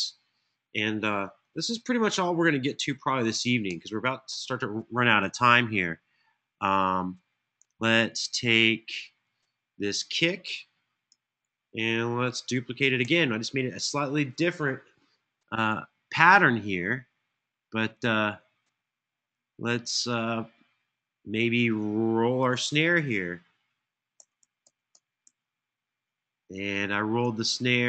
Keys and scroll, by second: 3.4 alt+f, 12.7 super+d, 23.9 super+d, 24.1 super+d, 24.7 super+d, 24.9 super+d.